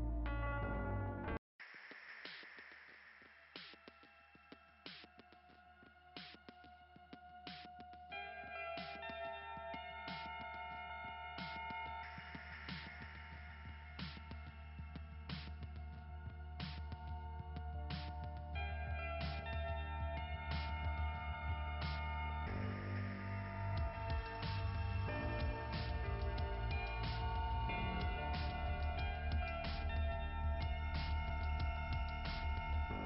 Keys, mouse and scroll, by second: 4.1 click, 16.0 click, 16.9-18.4 scroll down 4, 17.3 click, 18.4 click, 20.4-21.6 typing, 22.2 click, 25.7 [, 30.1 click, 31.6 click.